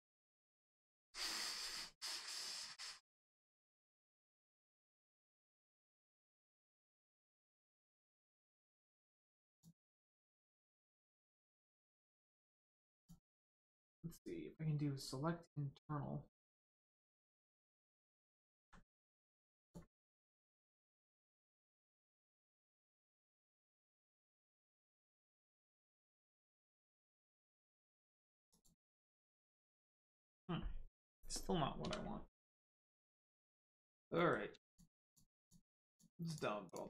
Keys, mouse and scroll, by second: 9.4 click, 12.9 click, 16.3 click, 18.5 ctrl+z, 19.5 z, 28.4 click, 31.8 2, 32.4 middle click, 33.7 click, 34.1 middle click, 34.6 shift+click, 35.0 shift+click, 35.4 shift+click, 35.8 shift+click, 36.2 shift+click, 36.6 shift+click.